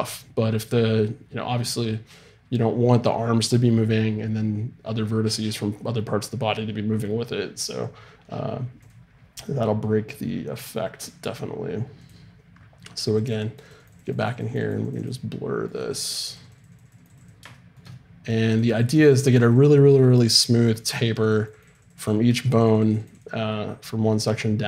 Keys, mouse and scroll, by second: 13.1-24.6 drag.